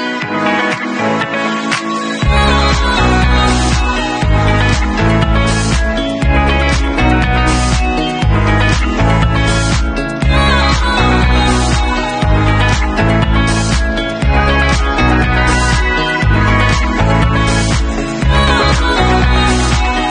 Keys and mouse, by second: 4.6 middle click, 4.6 right click, 5.4 shift+a, 11.4-12.6 middle drag, 12.3 r, 12.6-17.8 drag, 14.5 e, 17.0 w, 17.8-18.4 middle drag, 18.4-20.1 drag.